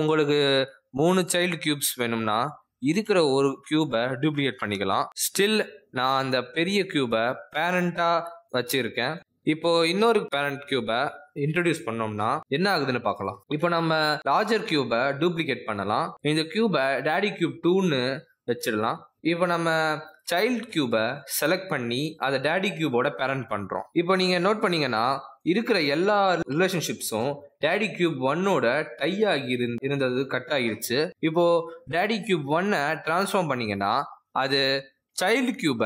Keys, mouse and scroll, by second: 0.7 click, 0.7-1.2 scroll down 1, 1.2 click, 2.6 r, 4.6 click, 5.9 shift+d, 8.2-8.9 scroll down 3, 8.9-9.2 scroll down 1, 10.0 click, 10.5 click, 10.8 r, 14.5 shift+d, 16.9 click, 17.8 click, 18.9 d, 21.1 click, 22.0 click, 23.0 d, 25.2 click, 25.6 shift+click, 26.0 shift+click, 27.1 shift+click, 27.8 right click, 33.2 click, 33.9 g, 34.9 r.